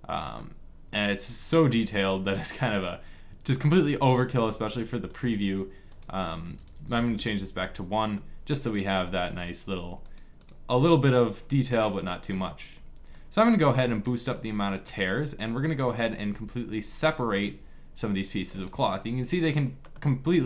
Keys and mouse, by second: 0.9-2.5 middle drag, 2.9-4.5 drag, 5.3-7.8 drag, 7.8 middle click, 9.7-11.7 drag, 11.7 middle click, 13.0 click, 14.0 click, 16.0 g.